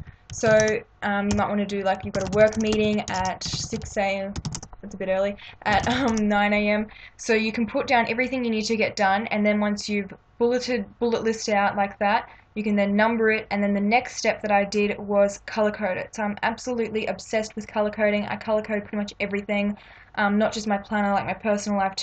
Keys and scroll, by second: 0.0-6.4 typing, 1.3 Return.